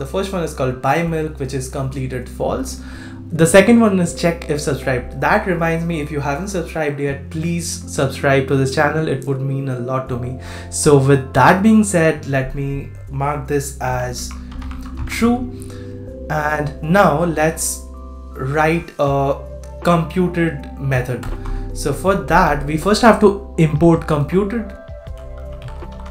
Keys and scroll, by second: 15.0 super+s.